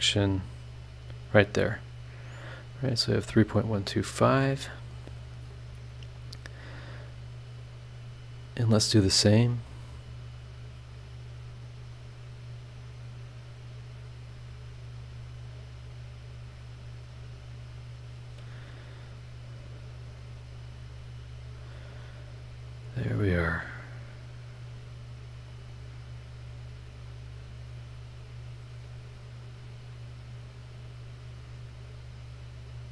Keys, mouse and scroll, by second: 0.8 click, 3.2 click, 4.1 scroll down 2, 4.7 scroll up 2, 9.2 right click, 9.7 click, 11.9 click, 12.7 click, 13.8 scroll down 1, 15.0 click, 15.6 click, 15.9 scroll down 1, 16.5 scroll up 1, 17.7 click, 18.8 click, 19.2 scroll down 1, 19.6 scroll up 1, 20.9 click, 21.6 click, 22.7 click, 23.4 click, 24.7 click, 25.5 click, 26.5 click, 27.1 click, 30.6 click, 32.2 click.